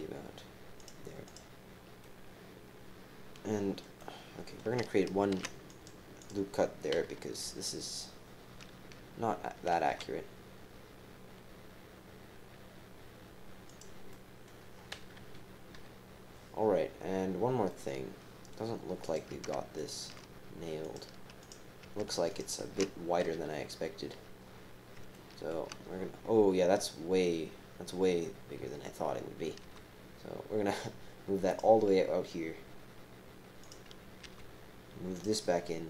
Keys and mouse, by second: 1.1-1.8 typing, 1.2 click, 2.0-3.8 drag, 4.0 click, 5.3 ctrl+r, 7.0 KP_3, 7.4 KP_1, 9.9 g, 14.1 click, 15.1 KP_3, 15.7 KP_1, 17.7 right click, 19.7 alt+shift+click, 20.9 click, 21.4 click, 22.3 alt+shift+click, 23.3 KP_3, 23.7 KP_1, 25.1 shift+middle click, 29.6 g, 33.6 click, 34.2 g.